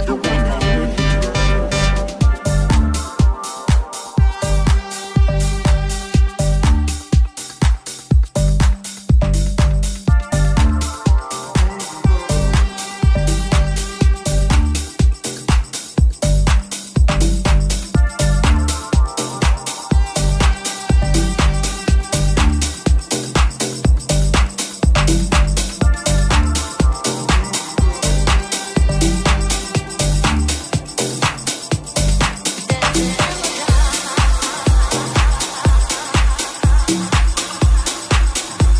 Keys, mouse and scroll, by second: 16.3 right click, 16.4 shift+middle click, 16.7 shift+right click, 16.9-17.9 middle drag, 17.9 shift+right click, 18.2-20.7 shift+middle drag, 19.3 shift+right click, 19.7 shift+right click, 20.7 shift+click, 21.1-28.3 shift+middle drag, 28.2-31.2 shift+drag, 28.2 right click, 28.5 middle click, 28.5 right click, 31.3 click, 31.5-32.8 shift+drag, 32.8 click, 32.9-38.7 drag, 33.5 ctrl+r.